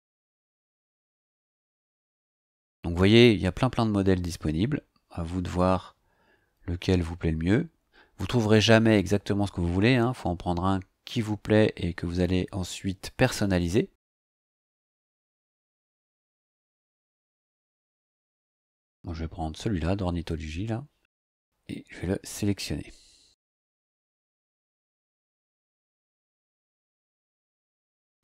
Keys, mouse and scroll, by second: 4.6-5.3 scroll down 2, 6.5-7.4 scroll down 2, 10.0 scroll down 2, 10.8 scroll down 2, 12.2-13.6 scroll down 2, 15.5-15.8 scroll down 2, 16.8-24.5 scroll down 2, 24.5 click.